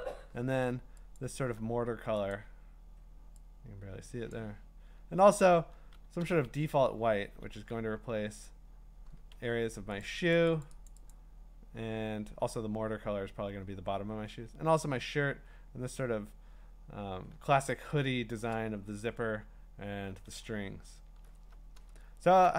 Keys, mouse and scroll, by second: 0.4 click, 1.2 alt+click, 2.3 click, 4.3 click, 6.2 d, 7.1 Escape, 7.4 Escape, 8.5 click, 9.3 x, 10.0 click, 10.3 click, 10.7 click, 10.9 click, 11.1 click, 17.3 click, 17.4-18.3 alt+scroll, 20.6-21.4 scroll, 22.4 scroll down 9.